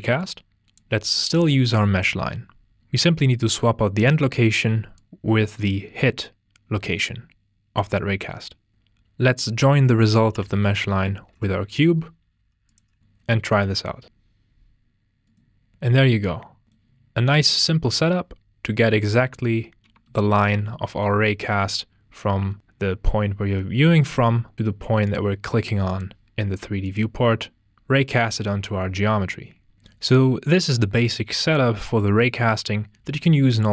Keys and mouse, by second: 0.2-0.5 drag, 4.9 click, 7.0 click, 8.7-9.3 drag, 9.3 ctrl+BackSpace, 11.2 shift+click, 11.4 g, 11.5 click, 12.2 drag, 12.7 drag, 13.0 ctrl+space, 13.7 click, 17.5-18.6 drag, 21.3 click, 25.5-27.0 drag.